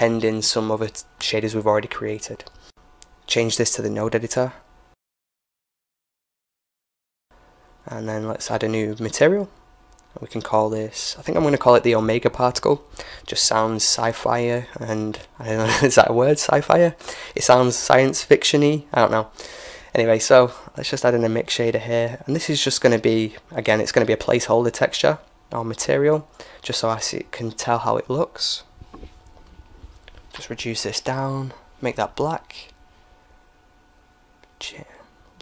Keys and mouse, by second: 3.9 m, 5.7 n, 7.9-11.1 drag, 15.2-17.0 middle drag, 16.3-18.2 drag, 17.6 shift+a, 20.9-22.8 drag, 21.4 shift+a, 24.7-26.4 drag, 26.6-28.3 drag, 29.1-30.9 drag, 32.0-33.6 middle drag, 33.6-35.4 drag.